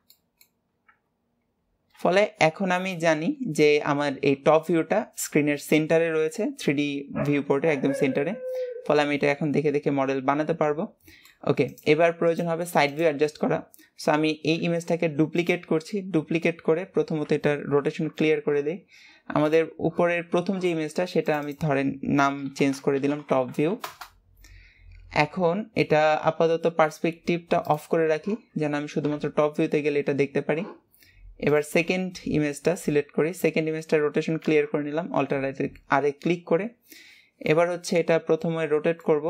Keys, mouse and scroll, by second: 0.3 shift+middle click, 0.9 scroll up 1, 2.0-2.6 scroll down 3, 2.6 shift+middle click, 3.6 scroll down 2, 9.3-11.8 middle drag, 11.8-16.3 drag, 16.3 scroll down 2, 17.9 alt+r, 37.6-39.2 middle drag.